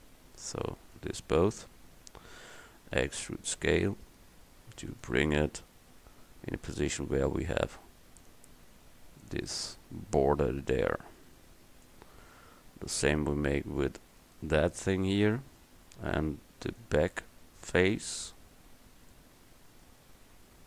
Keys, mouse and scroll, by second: 1.6 KP_1, 3.1 e, 14.3-15.3 right drag, 15.3 middle click, 15.6 middle click, 16.0 middle click, 17.8 middle click, 18.7-20.6 middle drag.